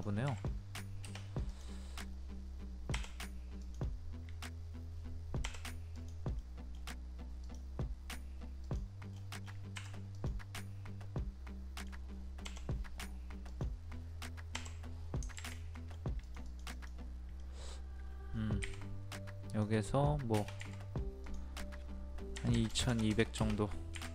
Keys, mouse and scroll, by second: 2.9 Delete, 3.6 click, 5.4 Delete, 6.0 click, 6.4 middle click, 6.7-7.4 scroll down 1, 7.4 click, 9.1 middle click, 9.2 scroll down 1, 9.7 Escape, 10.1 click, 10.6-12.4 middle drag, 12.4 Delete, 13.5 click, 14.5 Delete, 15.7 middle click, 16.2 click, 17.4 middle click, 18.1 scroll up 1, 18.6 r, 19.5 click, 22.3 KP_2.